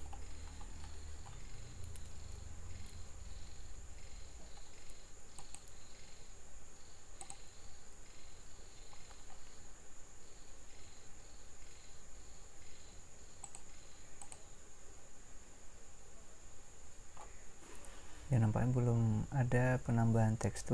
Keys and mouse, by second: 2.1 Escape, 7.3 Escape.